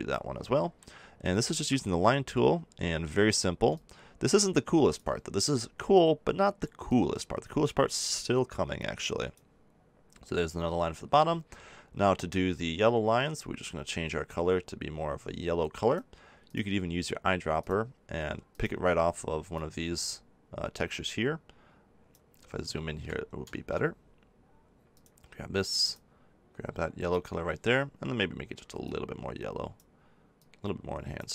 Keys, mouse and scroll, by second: 22.3 middle click, 23.2-24.9 middle drag, 24.9-26.6 drag, 28.8-31.3 drag.